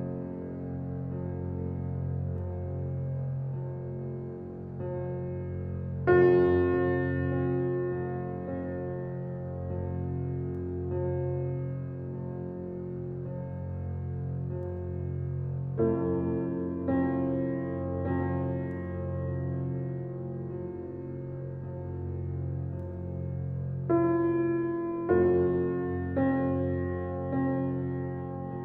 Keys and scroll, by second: 3.6 g, 7.9 g, 25.8 g.